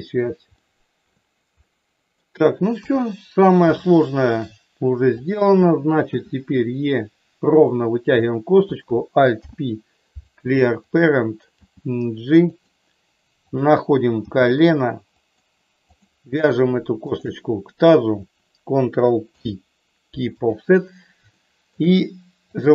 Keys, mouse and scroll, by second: 0.6 shift+middle click, 1.6 middle click, 2.7 KP_1, 3.7 shift+middle click, 6.1 e, 7.4 click, 8.1 click, 9.3 alt+p, 11.5 g, 12.5 click, 14.2 g, 15.2 click, 17.0 shift+click, 19.2 ctrl+p, 21.3 shift+middle click, 22.5 click.